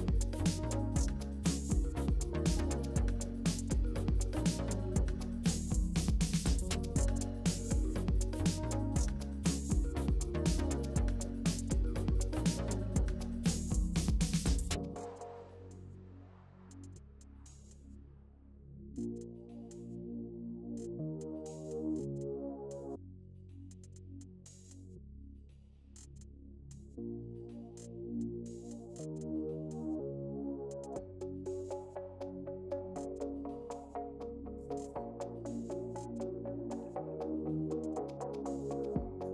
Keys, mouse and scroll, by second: 13.6-15.4 drag, 19.4-22.5 drag, 22.7-25.2 middle drag, 25.2 click, 26.4-29.8 middle drag, 29.8 click, 34.1 click, 34.9-37.9 middle drag.